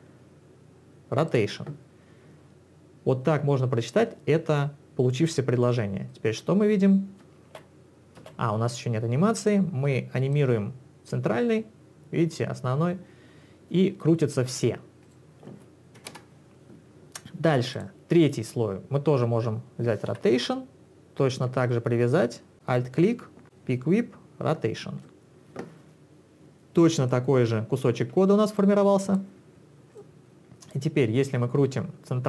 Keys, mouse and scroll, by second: 1.3 click, 6.1 click, 7.4 space, 8.2 space, 9.4 click, 10.3 click, 15.1 click, 16.0 0, 16.1 Return, 17.7 click, 20.1 r, 21.1 ctrl+z, 21.1 click, 22.5 alt+click, 28.6 click, 30.0 click, 30.7 click.